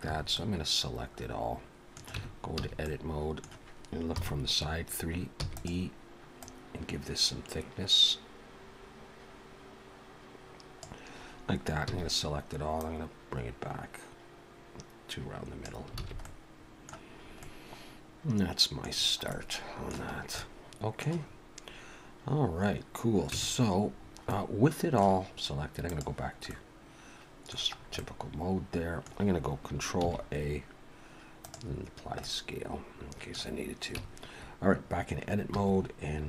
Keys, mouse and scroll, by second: 0.1 a, 0.3 middle click, 2.2 Tab, 2.6 a, 2.9 middle click, 4.1 KP_3, 5.4 e, 6.4 click, 11.9 a, 12.8 click, 16.0 alt+a, 16.2 middle click, 17.2 scroll up 2, 17.4 middle click, 18.9-19.3 scroll down 4, 19.3 middle click, 20.1 scroll up 3, 20.4 middle click, 23.3 Tab, 24.0 scroll down 2, 24.3 middle click, 25.9 click, 26.5 middle click, 27.7-28.1 scroll up 2, 28.0 middle click, 30.0 ctrl+a, 31.9-32.7 scroll down 2, 32.2 middle click, 34.0 Tab, 34.4-35.2 scroll up 2, 35.4 2.